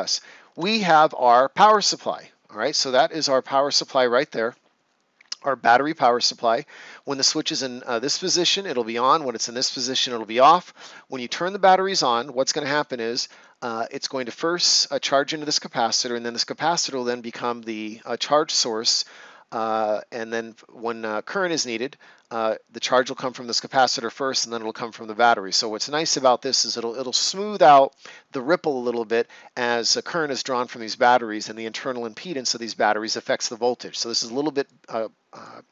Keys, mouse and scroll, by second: 0.2-0.5 ctrl+scroll down 1, 5.4 ctrl+scroll down 1, 5.6-6.4 ctrl+scroll up 1, 34.6 click.